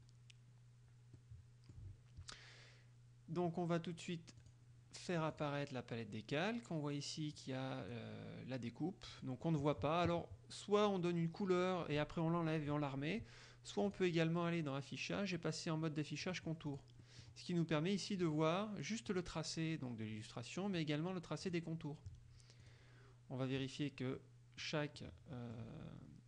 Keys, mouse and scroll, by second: 1.3 click, 2.1-4.5 middle drag, 4.5 click, 4.9 middle click, 5.5 click, 5.7 middle click, 7.5 click, 9.3 click, 10.1-11.6 middle drag, 14.0 click, 16.3 click, 16.8 click, 18.3 click, 19.3 click, 21.6 click, 22.8 click, 23.8 click, 24.3 middle click, 25.1 middle click.